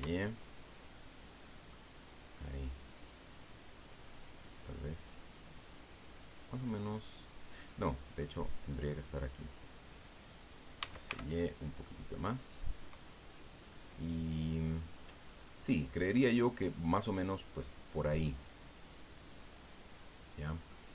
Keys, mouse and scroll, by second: 1.3 click, 1.7-4.2 middle drag, 5.0-9.2 drag, 10.8 s, 11.1 y, 12.0 click, 12.3-14.8 middle drag, 15.0-15.6 scroll up 1, 20.7 click.